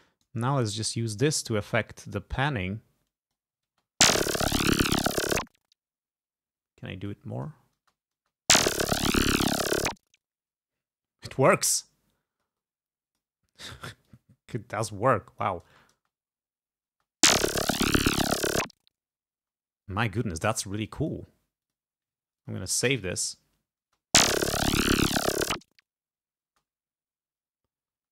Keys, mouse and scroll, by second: 2.4-3.6 drag, 3.7 space, 7.2 click, 7.8 space, 11.6-13.4 drag, 14.1-15.7 drag, 15.7 space, 17.0 space, 19.5 space, 21.0 click, 21.7 click, 22.4 click, 22.9 ctrl+s, 23.8 space, 26.5 space, 28.0 space.